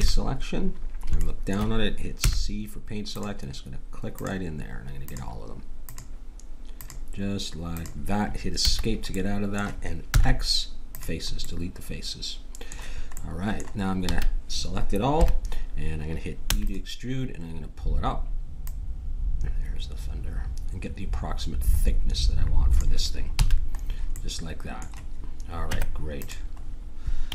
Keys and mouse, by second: 0.0 KP_7, 2.2 c, 10.1 x, 14.0 a, 15.1 KP_1, 16.4 e, 18.6-20.5 drag, 23.3 a, 23.8-25.7 middle drag, 25.7 Tab.